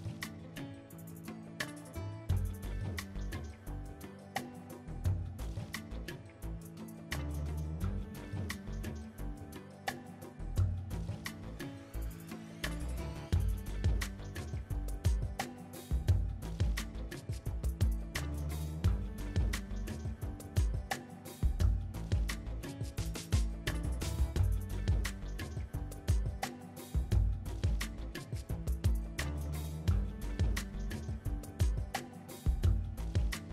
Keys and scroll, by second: 11.7 Tab, 12.7 KP_3, 14.3 r, 25.4 ctrl+j.